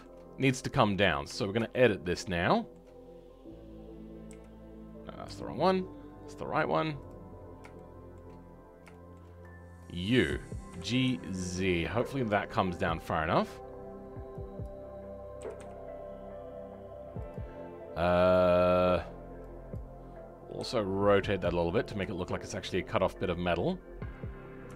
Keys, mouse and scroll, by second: 0.8-1.2 scroll down 2, 1.2 Tab, 1.6-4.2 shift+middle drag, 4.2 KP_1, 6.9 click, 7.2-7.7 scroll up 2, 7.7 shift+middle click, 8.3 scroll up 4, 8.8 shift+middle click, 9.7 click, 10.7 g, 17.5-19.6 scroll up 2, 19.6 click, 22.3-24.0 shift+middle drag, 24.0 scroll down 2.